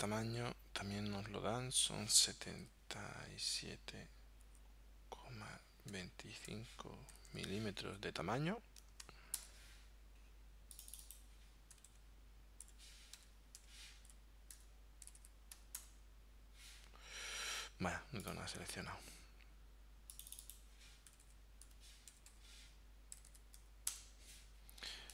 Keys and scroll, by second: 2.7 7, 3.5 7, 4.5 ,, 6.0 2, 6.5 5, 7.2 m, 9.4 Return, 11.8-15.1 typing, 15.8 Return, 21.1-23.2 typing, 23.9 Return.